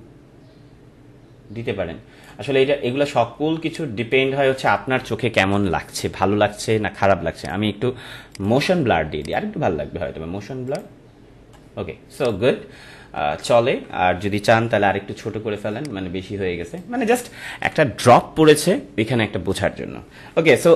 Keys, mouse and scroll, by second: 6.2 ctrl+-, 7.4 click, 13.1 ctrl+-, 14.7 ctrl+t, 15.7-19.3 alt+shift+drag, 20.3 alt+shift+click, 20.5 ctrl+-.